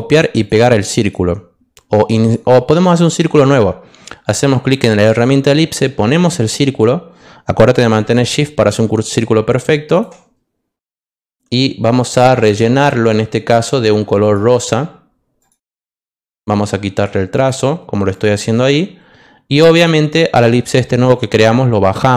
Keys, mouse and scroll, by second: 0.3 click, 1.0 click, 2.2 click, 4.6 click, 5.7-10.0 drag, 12.4 click, 14.2 click, 15.4 click, 16.2 click, 17.3 click, 18.1 click, 19.7 click, 21.0-22.1 drag.